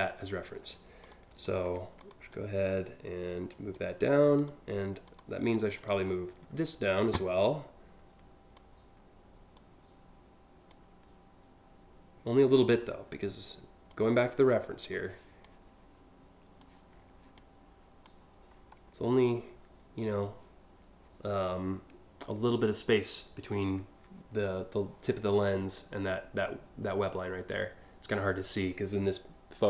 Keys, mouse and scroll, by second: 0.6 click, 1.0 ctrl+click, 1.6 click, 1.9-3.3 drag, 4.0 click, 4.7 click, 8.2-9.2 drag, 10.3-12.1 drag, 13.5 click, 14.5 click, 15.0-16.2 drag, 16.6 scroll up 2, 17.0 click, 18.1 scroll up 1, 18.5 scroll down 1, 25.3 scroll down 3.